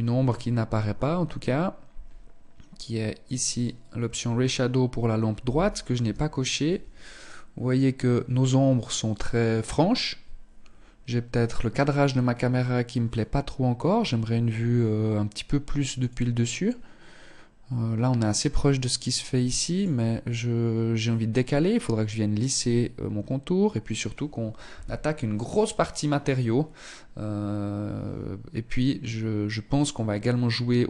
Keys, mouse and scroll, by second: 2.3 click.